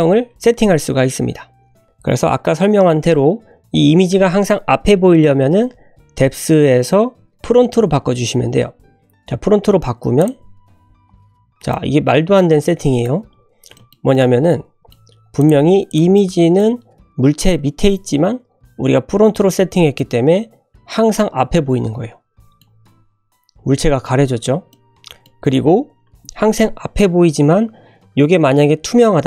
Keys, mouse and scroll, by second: 10.2 click, 11.5 scroll down 1, 11.7-13.2 middle drag, 13.3 scroll up 1, 13.7 middle click, 14.1-14.9 middle drag, 15.3 click, 15.8 click, 16.1 middle click, 19.9-22.6 middle drag, 22.6 `, 23.2 scroll down 1, 24.2 scroll down 1, 24.6-25.2 middle drag, 25.4 `.